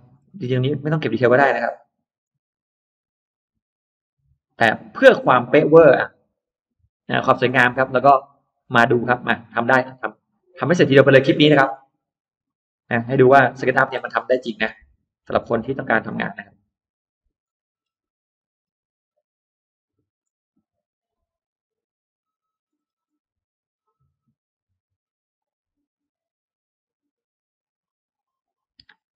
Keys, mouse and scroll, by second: 0.9 middle click, 1.4 click, 2.1 click, 2.9 click, 3.6 click, 4.7 click, 5.1 scroll down 2, 5.4-5.7 scroll up 2, 6.1 click, 6.7 click, 7.1-8.1 scroll down 4, 7.6 middle click, 8.2 middle click, 9.8 click, 10.8 click, 11.5 click, 11.9-12.7 scroll up 2, 12.4 middle click, 12.7 scroll down 1, 13.2-13.8 scroll up 3, 14.5 click, 15.1 click, 16.1 scroll down 2, 16.4-16.7 scroll up 2, 16.8 click, 17.3 click, 17.6 scroll down 1, 17.9 scroll up 1, 18.4 scroll down 1, 19.7 click, 20.0-20.3 scroll up 1, 20.9 click, 21.2-21.5 scroll up 1, 21.8 click, 22.3 click, 22.6-22.9 scroll down 2, 23.2-23.8 scroll up 4, 25.2 click, 26.1 click, 26.7 click, 28.3 click.